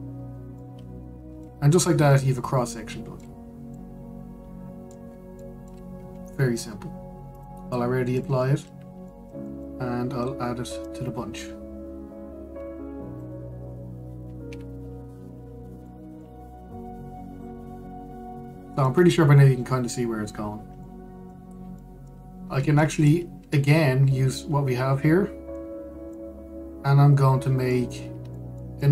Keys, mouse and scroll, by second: 0.2 click, 0.8-1.3 scroll, 1.3-4.0 middle drag, 4.0-4.4 scroll up 2, 4.4-5.7 middle drag, 5.7-6.1 scroll down 2, 6.1-6.6 middle drag, 6.6-8.0 scroll down 2, 8.0-9.3 drag, 9.3-9.7 scroll down 2, 9.7-11.5 shift+middle drag, 11.5 click, 15.2 KP_Decimal, 15.9-16.5 scroll down 1, 16.5-18.0 middle drag, 18.0 click, 19.5 click, 21.2-21.5 scroll down 1, 21.5-24.3 middle drag, 24.3-25.0 scroll up 1, 25.0-28.6 middle drag, 28.6 scroll.